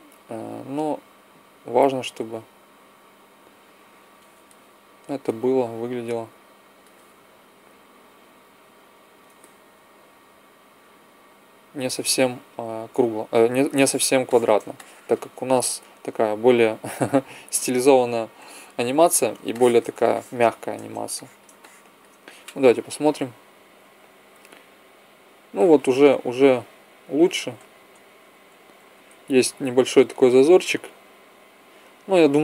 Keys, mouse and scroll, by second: 5.6-7.8 drag, 9.6 g, 11.6-13.7 drag, 13.2 Tab, 18.3 KP_0, 22.8 Right, 23.0 Right, 23.2 Right, 23.7 Right, 25.2 Right, 26.0 Left, 26.3 Left, 26.5 Left, 27.0 Left, 27.5 Right, 27.8 Right, 28.1 Right, 28.4 Right, 28.7 Right, 29.0 Left, 29.2 Left, 29.4 Left.